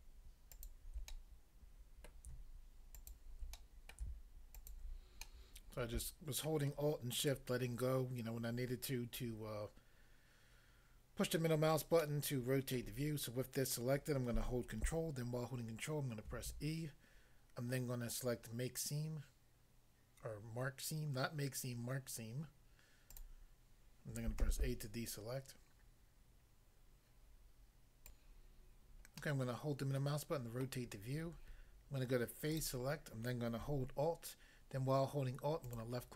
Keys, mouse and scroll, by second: 0.5 middle click, 0.5 alt+click, 0.6 alt+click, 1.1 middle click, 2.0 middle click, 3.0 alt+click, 3.6 middle click, 3.9 middle click, 4.6 alt+click, 5.3 middle click, 6.5 middle click, 12.0 middle click, 12.8 middle click, 16.3 ctrl+e, 23.1 click, 24.4 a, 28.0 click, 29.2 middle click, 30.7 middle click, 32.5 click, 32.6 click, 35.7 alt+click.